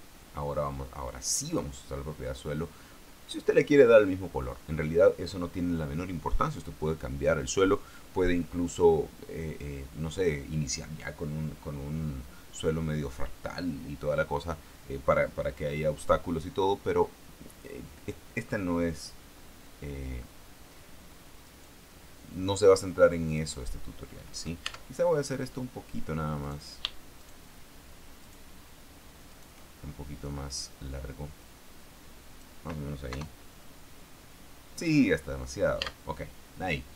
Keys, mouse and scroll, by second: 1.5 click, 21.8 right click, 23.7 right click, 25.0 Tab, 25.4 middle click, 26.8 right click, 27.5 shift+right click, 28.6 shift+right click, 29.7 shift+right click, 30.2 shift+right click, 31.8-33.0 drag, 33.5 KP_0, 34.5-35.2 scroll down 1, 35.2-35.5 scroll up 1, 35.9 scroll down 1, 36.2 Tab.